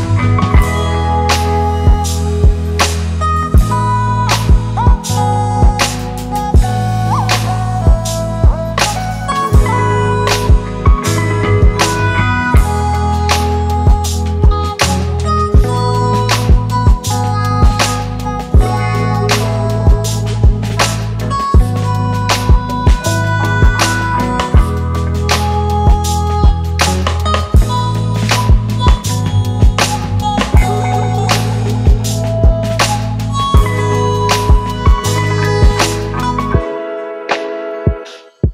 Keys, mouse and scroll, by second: 7.3-8.0 scroll up 1, 16.8-17.5 alt+scroll down 1, 18.9-20.1 alt+scroll up 1, 32.0 e.